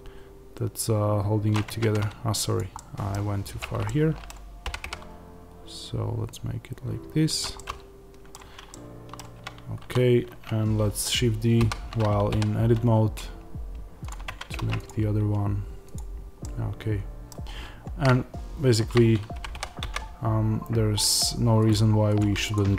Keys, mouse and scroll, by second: 1.6 Tab, 2.4 click, 2.6 middle click, 3.5 click, 3.7-7.3 middle drag, 4.5 g, 7.3 click, 7.4-14.0 middle drag, 8.3 Tab, 9.1 Tab, 9.7 a, 11.5 shift+d, 14.0 click, 14.2 Tab, 14.8 click, 16.3-21.0 middle drag, 19.3 g, 21.0 click, 22.4 shift+click.